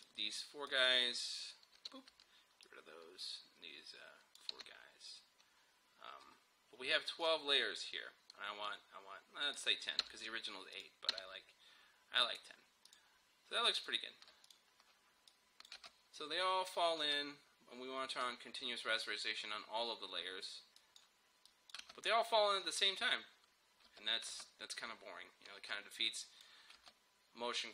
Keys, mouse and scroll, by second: 1.8 Delete, 2.7-4.6 drag, 4.6 Delete, 7.2 click, 10.0 Delete, 10.8 click, 11.1 Delete, 12.3 click, 15.8 space, 18.3-20.8 drag, 21.8 space, 23.9 space, 26.2 click, 26.8 space.